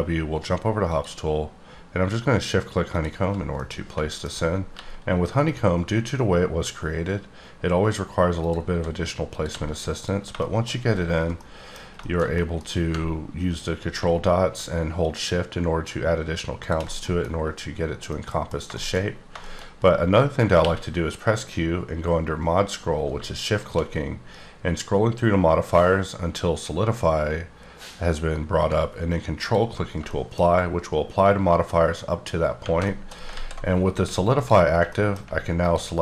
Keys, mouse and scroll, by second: 0.8 click, 2.9 shift+click, 3.5 middle click, 4.6 g, 8.6 s, 9.3 click, 9.5 g, 9.9 click, 10.3 middle click, 11.3 middle click, 11.9 shift+middle click, 15.0-16.9 ctrl+shift+drag, 18.0 middle click, 18.1 middle click, 19.0-19.7 scroll up 6, 19.4 shift+middle click, 20.5 q, 23.1 shift+Num_Lock, 23.5 shift+click, 24.3-27.5 scroll up 5, 29.4 ctrl+Num_Lock, 29.4 ctrl+click, 30.1 shift+middle click, 30.5-31.3 scroll up 3, 32.8 shift+middle click, 33.3 alt+z, 33.7 scroll up 2, 34.3 alt+click, 34.9 middle click, 35.6 alt+click.